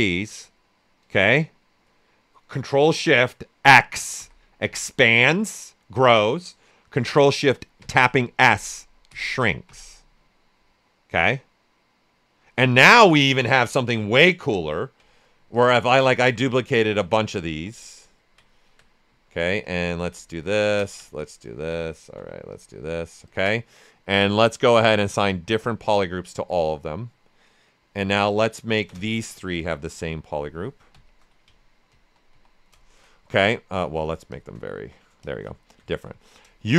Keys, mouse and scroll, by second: 3.6 ctrl+shift+x, 7.7 ctrl+shift+s, 12.8 ctrl+shift+s, 12.9 click, 13.3 ctrl+shift+right click, 13.6 ctrl+alt+right click, 14.4 w, 15.5 ctrl+click, 17.8 ctrl+click, 18.5 ctrl+alt+right click, 19.6 ctrl+click, 20.2 ctrl+alt+right click, 20.5 ctrl+alt+right click, 21.1 ctrl+click, 22.1 alt+right click, 22.5 ctrl+click, 24.9 click, 26.3 q, 28.7 ctrl+shift+click, 29.5 ctrl+shift+space, 30.9 ctrl+shift+a, 31.8 ctrl+w, 32.8 ctrl+shift+click, 33.1 alt+shift+right click, 34.3 ctrl+shift+click, 34.7 ctrl+w, 35.2 ctrl+shift+click, 35.7 alt+right click.